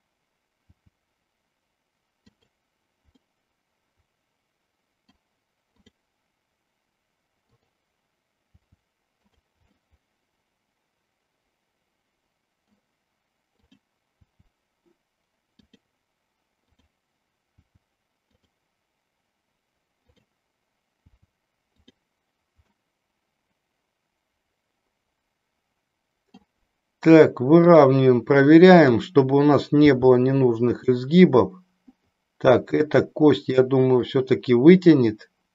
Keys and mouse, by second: 0.7 g, 3.2-5.2 middle drag, 5.8 click, 7.4 click, 8.5 g, 9.8-12.7 middle drag, 13.5 click, 14.2 g, 17.7 g, 18.3 click, 21.0 g, 22.8-26.3 middle drag, 27.5 click, 28.8 click, 29.8 g, 30.8 click, 32.9 middle click.